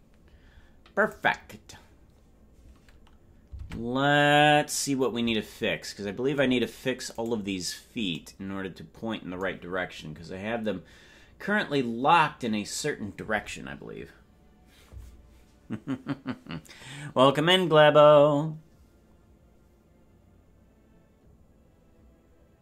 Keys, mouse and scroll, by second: 1.0 click, 3.6 ctrl+Tab, 4.4-5.5 scroll up 5, 7.3 right click.